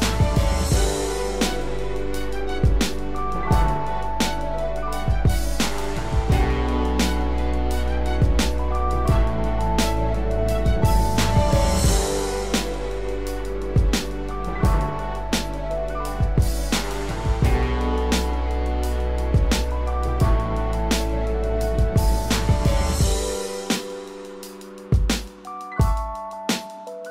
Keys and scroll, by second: 0.1 ctrl+space.